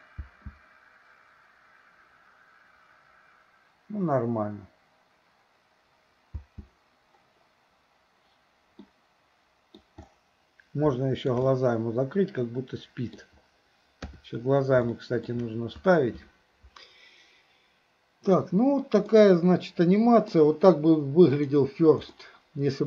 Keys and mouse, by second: 0.3 space, 6.4 space, 8.8-9.8 middle drag, 11.0-11.4 shift+middle drag, 11.5-13.2 middle drag, 14.0 KP_3, 14.9-15.3 shift+middle drag, 19.1-20.3 middle drag, 21.4 click, 22.2-22.8 middle drag.